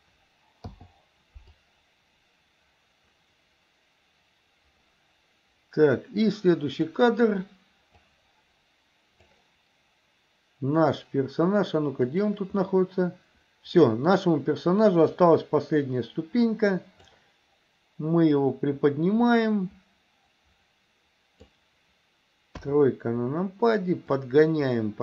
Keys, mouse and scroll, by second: 0.7 i, 1.7-6.9 drag, 8.1 click, 12.2 click, 12.7-14.2 middle drag, 15.2-17.2 drag, 18.5-21.5 drag, 22.6 KP_3, 24.2-25.0 drag.